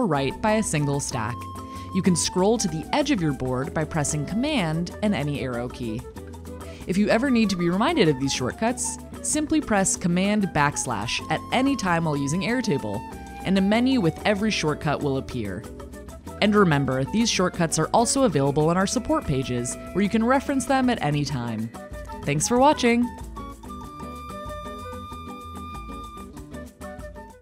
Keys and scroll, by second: 3.6 super+Right, 9.0 super+/.